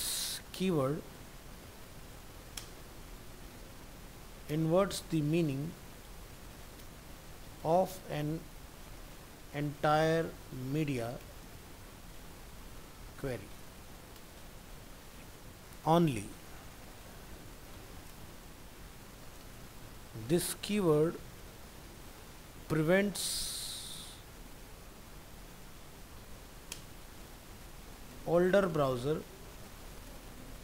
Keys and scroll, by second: 15.5 ctrl+c, 15.9 ctrl+Return, 17.8 shift+Right.